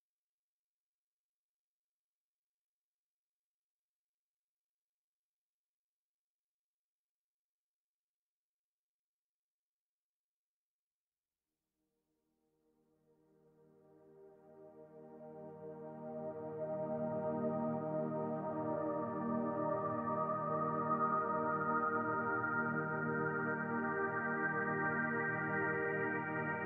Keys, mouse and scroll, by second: 1.5 middle click, 15.6 click, 21.0 middle click, 21.0-21.5 scroll up 3, 21.5 shift+middle click, 22.3 middle click.